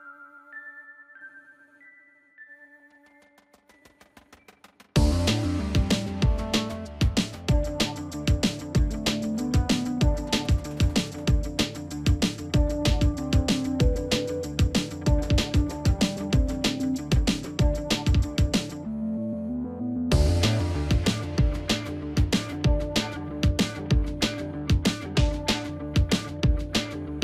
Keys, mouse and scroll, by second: 0.5 ctrl+j, 1.8 ctrl+-, 2.5 ctrl+t, 3.8-4.6 shift+click, 4.5 shift+click, 4.5 shift+click, 5.9 shift+click, 11.4 ctrl+click, 13.5 ctrl+a, 13.5 click, 14.8 ctrl+d, 17.1 shift+click.